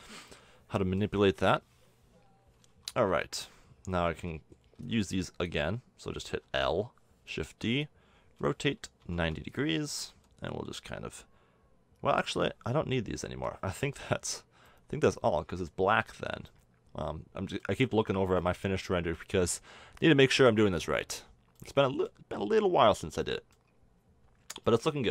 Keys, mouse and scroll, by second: 1.3 KP_7, 2.7 Tab, 3.1 z, 4.1 a, 4.8 b, 6.4 l, 7.4 shift+d, 8.4 r, 10.1 g, 13.9 x, 15.1 Tab, 15.8 z, 18.2 click, 18.3 click, 20.5 middle drag.